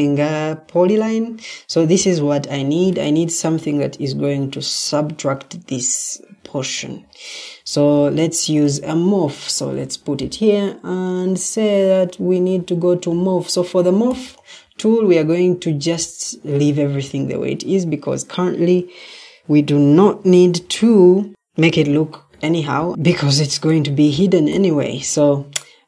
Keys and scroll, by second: 7.8 ctrl+d, 9.6 Escape.